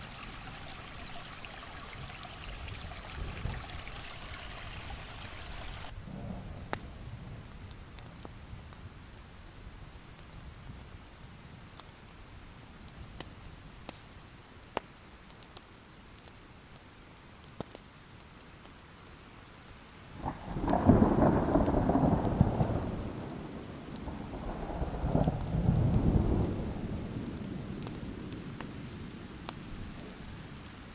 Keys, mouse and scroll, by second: 0.8 click, 2.9 alt+scroll up 1, 3.4-5.0 drag, 5.1 alt+scroll down 1, 5.6 alt+scroll up 1, 6.1 click, 6.6 alt+scroll down 1, 7.9 click, 13.5 alt+scroll down 1, 13.9 alt+scroll up 1, 16.3-16.9 ctrl+scroll down 1, 16.9 click, 17.2 alt+scroll up 1, 17.8 click, 22.4 alt+scroll down 1, 22.8-24.7 alt+scroll up 2, 23.0 click, 25.2 click, 25.8 ctrl+scroll up 1, 26.4-27.0 ctrl+scroll up 1, 27.0-27.9 scroll up 1, 27.9-30.9 drag, 29.6 scroll down 1.